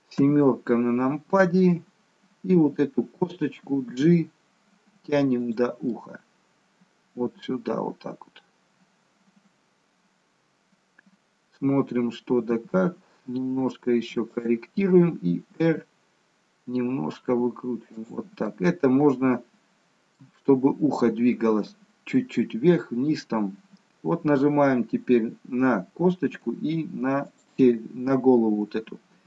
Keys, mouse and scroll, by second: 0.2 KP_7, 3.7 g, 6.0 middle click, 12.3 g, 18.5 middle click, 20.3 middle click, 27.3 shift+click.